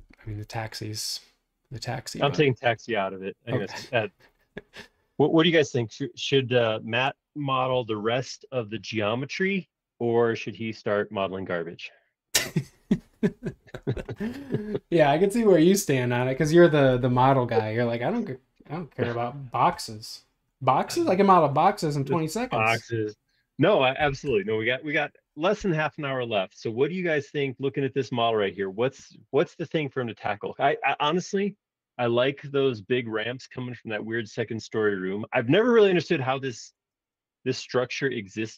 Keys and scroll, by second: 26.2 super+Tab, 27.1 space, 33.7 super+z, 33.9 Escape, 34.1 space, 34.3 Escape, 35.8 super+Tab.